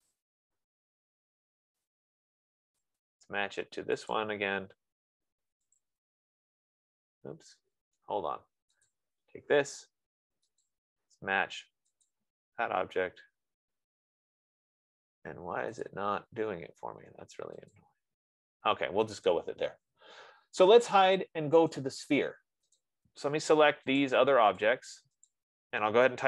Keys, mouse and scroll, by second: 0.3 click, 2.2 click, 3.3 click, 8.1 Escape, 8.3 Escape, 8.7 Escape, 9.3 click, 9.9 F15, 11.2 click, 12.4 click, 16.2 click, 18.2 click, 19.8 click, 22.0 click, 24.4 shift+click, 25.1 click, 25.6 shift+click.